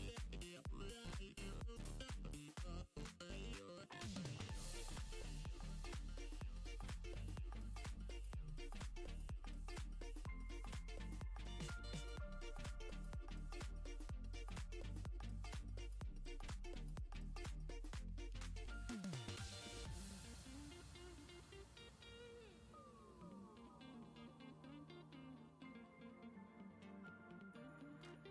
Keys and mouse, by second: 0.2 middle click, 0.5 shift+middle click, 0.7 middle click, 1.2 middle click, 1.4 middle click, 2.0 middle click, 3.2 f, 3.3 g, 3.6 click, 4.1 click, 4.4 click, 4.6 middle click, 4.9 click, 5.3 middle click, 5.6 click, 5.9 middle click, 6.1 middle click, 6.5 middle click, 6.9 middle click, 7.1 f, 7.3 click, 7.8 click, 8.3 click, 8.6 middle click, 8.7 middle click, 9.2 middle click, 9.8 f, 9.9 g, 10.0 click, 10.3 click, 10.8 middle click, 11.3 middle click, 12.0 click, 12.7 middle click, 13.2 middle click, 13.4 middle click, 13.7 middle click, 13.8 shift+middle click, 14.1 shift+middle click, 14.4 middle click, 14.9 middle click, 15.1 s, 15.2 click, 15.3 f, 15.6 click, 15.9 click, 16.3 click, 16.6 middle click, 16.8 click, 16.9 middle click, 17.4 middle click, 17.7 shift+c, 17.8 f, 18.0 click, 18.1 click, 18.5 shift+click, 18.9 middle click, 19.0 shift+c, 19.2 ctrl+click, 19.3 ctrl+click, 19.6 middle click, 19.8 ctrl+click, 20.1 ctrl+middle click, 20.9 middle click, 21.1 middle click, 21.3 shift+middle click, 21.9 middle click, 22.7 middle click, 22.9 middle click, 23.2 middle click, 23.7 f, 23.9 middle click, 25.0 click, 25.5 middle click, 26.1 middle click, 26.3 middle click, 27.1 middle click, 27.2 middle click, 27.3 g, 27.5 middle click, 27.6 f, 27.8 click, 28.1 f.